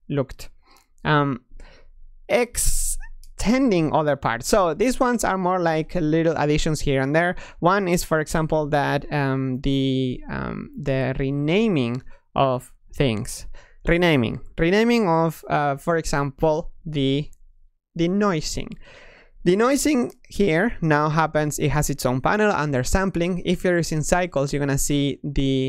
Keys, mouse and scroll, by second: 4.1 drag, 4.7 click, 10.4 click, 16.6-19.7 drag.